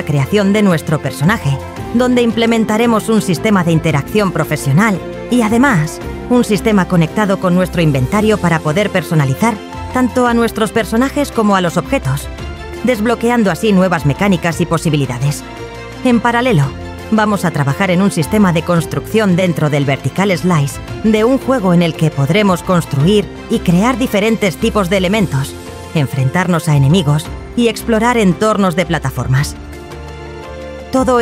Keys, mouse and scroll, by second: 0.0 scroll down 1, 0.7 BackSpace, 0.9 click, 1.2 click, 1.4 shift+m, 1.6 click, 2.2 scroll down 1, 2.6 click, 3.0 right click, 3.2 click, 4.0 c, 4.2 click, 4.4 scroll up 1, 4.8 click, 5.4 shift+w, 5.6 click, 6.0 alt+q, 6.2 click, 6.8 click, 7.0 BackSpace, 7.2 h.